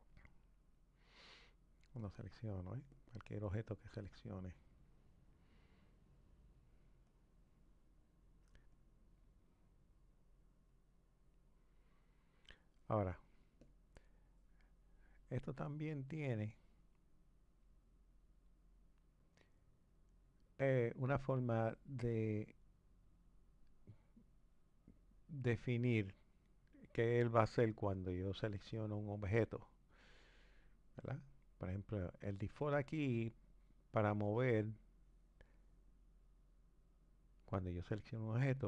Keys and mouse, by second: 2.0 click, 2.9 click, 4.0 click, 7.1-13.7 drag, 17.3-21.6 drag.